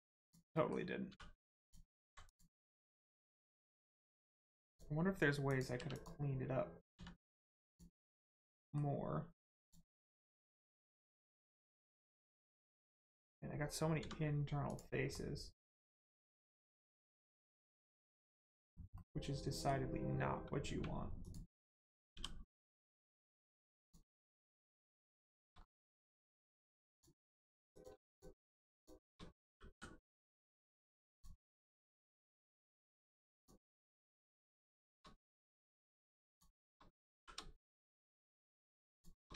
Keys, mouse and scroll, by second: 0.1 click, 0.5 middle click, 1.1 2, 1.6 click, 2.2 click, 2.6 middle click, 2.9 scroll up 1, 3.3 shift+middle click, 3.7 middle click, 3.8 middle click, 4.7 click, 5.7 3, 5.9 click, 6.9 x, 7.6 click, 8.1 middle click, 9.5 click, 10.5 middle click, 11.3 scroll down 1, 12.3 middle click, 14.7 click, 15.1 middle click, 17.5 middle click, 21.2 click, 22.5 middle click, 23.8 ctrl+click, 24.1 middle click, 24.5-24.8 scroll up 1, 24.9 middle click, 25.3 shift+middle click, 25.5 scroll up 1, 26.9 click, 28.1 shift+click, 28.7 shift+click, 29.7 m, 31.1 click, 31.6 middle click, 32.5 shift+middle click, 33.3 middle click, 33.7 scroll down 1, 34.2 middle click, 35.3 middle click, 36.3 shift+click, 37.1 shift+r, 38.0 click, 38.9 shift+click.